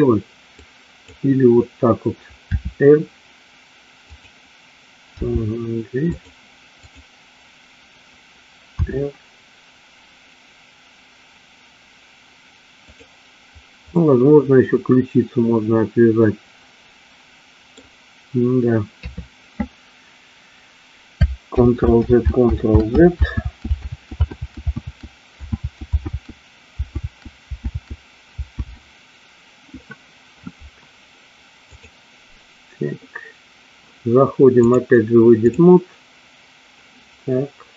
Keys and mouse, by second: 0.6 click, 2.7 r, 5.2 g, 9.0 r, 14.0-17.8 middle drag, 19.0 KP_3, 21.8 ctrl+z, 23.6 ctrl+z, 25.8 ctrl+z, 27.9 ctrl+z, 28.9 ctrl+z, 31.8 click, 34.8-35.8 drag.